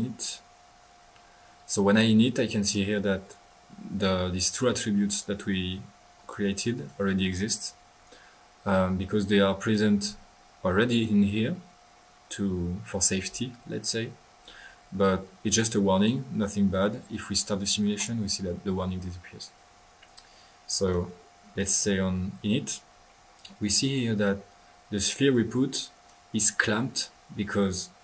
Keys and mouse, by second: 0.2-0.9 drag, 2.7-3.2 right drag, 2.7-3.9 typing, 3.2 right drag, 4.6 click, 5.2-7.1 typing, 6.1-6.4 drag, 6.6-7.1 drag, 9.6-10.1 drag, 9.6-10.4 typing, 15.4 right click, 15.9 click, 16.2 drag, 17.9 click, 18.5-19.7 drag, 20.8 click, 22.4-23.2 typing, 23.0-23.6 middle drag, 24.3 middle click, 24.9 click, 25.7 click.